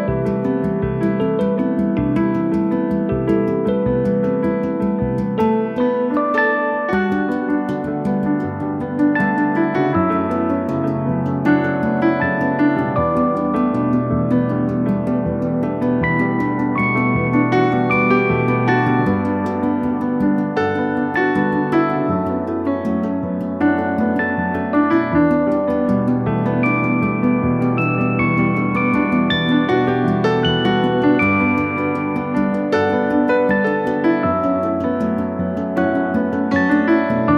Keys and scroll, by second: 0.2 Delete, 1.4 p, 2.5 2, 3.3 Return, 9.3 m, 10.7 3, 11.1 Return, 17.8 m, 19.1 Right, 19.4 Left, 21.8 Right, 22.1 Left, 23.6 space, 24.5 m, 25.5 Right, 25.8 Left, 26.5 space, 27.6 r, 29.6 space, 30.7 s, 32.2 space.